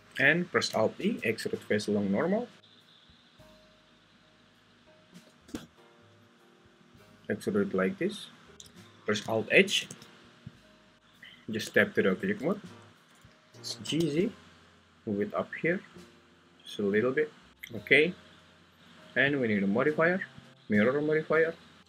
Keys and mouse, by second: 1.0 alt+e, 8.5 Tab, 9.8 alt+h, 10.5 click, 11.6 Tab, 13.5 g, 13.8 z, 17.0 click, 20.5 click.